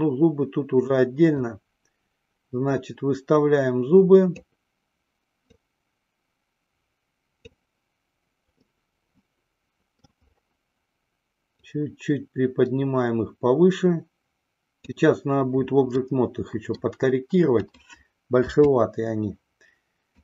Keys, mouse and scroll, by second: 1.9-4.9 drag, 5.8-8.1 drag, 9.1-10.4 middle drag, 11.8-15.4 drag, 16.3-17.2 middle drag, 17.8 click, 18.9 KP_3.